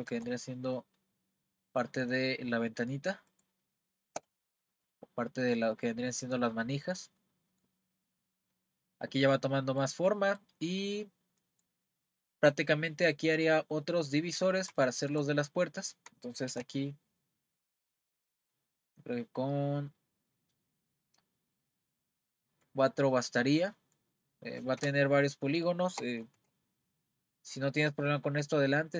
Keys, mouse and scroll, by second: 0.1 r, 4.7 click, 5.1-5.8 scroll down 1, 5.8 click, 6.1-15.3 middle drag, 15.3-16.1 scroll up 1, 16.5 r, 25.3-26.2 middle drag, 26.4 r.